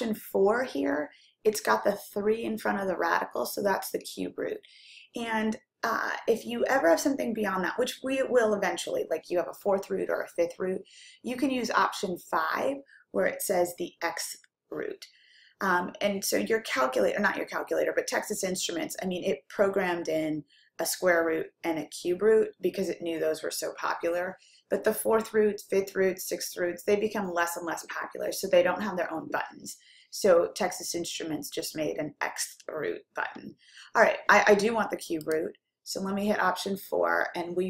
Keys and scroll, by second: 35.3 4.